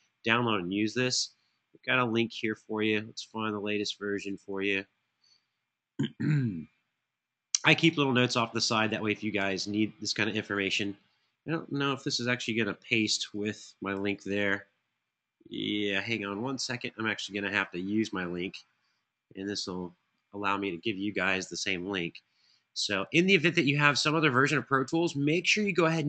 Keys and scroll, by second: 12.0 super+c, 14.2 super+v.